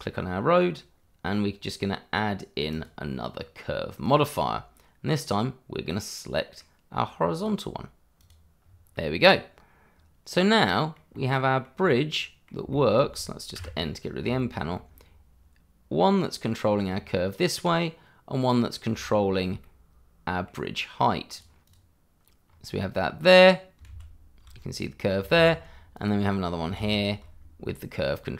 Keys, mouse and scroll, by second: 0.5 click, 2.7 click, 5.9 middle click, 7.4 click, 8.6-8.9 scroll down 1, 8.9 middle click, 11.6 middle click, 11.8-12.2 scroll up 1, 12.2 middle click, 12.9 shift+middle click, 14.3 shift+middle click, 15.0 middle click, 16.6 scroll down 1, 16.9 middle click, 19.2 shift+middle click, 19.8 middle click, 21.3 click, 21.9 click, 22.5-23.8 scroll up 1, 23.9 shift+z, 24.7-25.2 scroll down 1, 25.3 shift+z, 25.9 click, 27.3 shift+z, 27.4 scroll down 1.